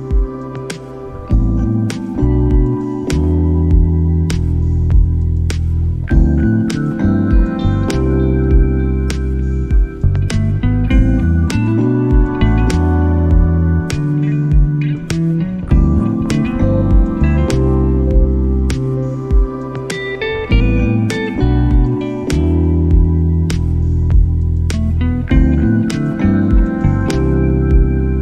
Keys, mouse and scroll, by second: 0.3 middle click, 0.9 ctrl+r, 1.4 ctrl+r, 2.5 middle click, 2.6 middle click, 2.7 shift+middle click, 2.8 middle click, 3.3 s, 4.3 middle click, 4.6 a, 4.7 middle click, 4.8 shift+middle click, 4.9 middle click, 5.3 shift+middle click, 5.5 s, 6.9 click, 7.0 middle click, 7.1 right click, 7.2 shift+right click, 7.5 shift+right click, 7.6 middle click, 7.7 shift+middle click, 7.8 middle click, 8.0 shift+middle click, 8.1 middle click, 8.2 middle click, 8.8 e, 9.7 middle click, 9.9 shift+middle click, 10.5 s, 12.6 middle click, 13.2 middle click, 13.5 middle click, 14.1 middle click, 14.5 s, 15.1 g, 15.9 middle click, 16.1 right click, 16.2 shift+right click, 16.4 shift+right click, 16.5 middle click, 16.9 KP_1, 18.5 e, 19.6 s, 23.1 middle click, 23.4 middle click, 24.0 middle click, 24.2 shift+middle click, 24.2 middle click, 26.2 middle click, 28.1 middle click.